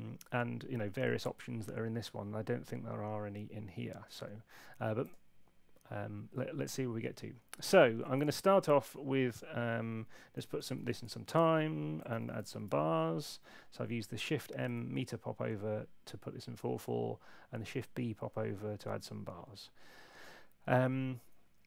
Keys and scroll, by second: 10.1-12.3 typing, 12.5 Return, 14.6 Escape.